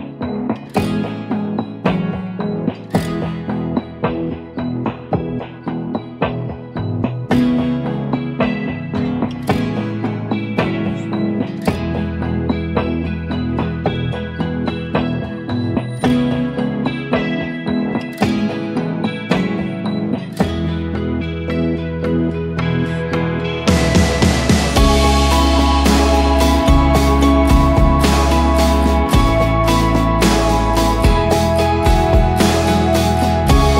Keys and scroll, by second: 1.0 typing, 2.1 typing, 4.2-8.3 typing, 10.4 Return, 16.9-17.7 typing, 17.9 Return, 20.3-21.0 typing, 21.9 ctrl+d, 23.7 ctrl+[, 28.7 shift+Right, 30.7 shift+Right, 30.7 ctrl+j, 31.0 ctrl+-, 31.1 ctrl+-, 31.7 ctrl+[, 31.9 ctrl+[, 32.0 ctrl+[.